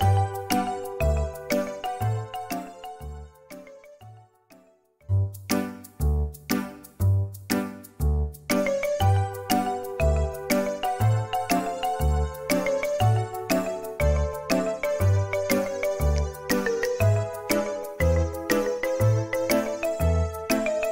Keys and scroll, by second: 1.0 space, 2.1 m, 7.0 typing, 11.8 space, 13.8 space.